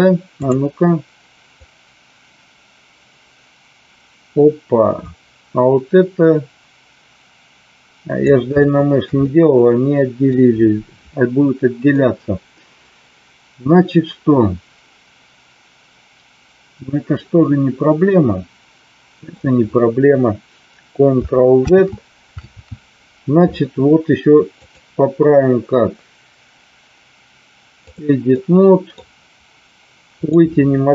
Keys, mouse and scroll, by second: 0.3 click, 1.7-8.2 drag, 8.4-9.1 shift+middle drag, 9.2-10.3 middle drag, 11.8-19.3 middle drag, 21.8 ctrl+z, 22.6 ctrl+z, 24.7-28.0 drag, 28.3 middle click, 30.1 click.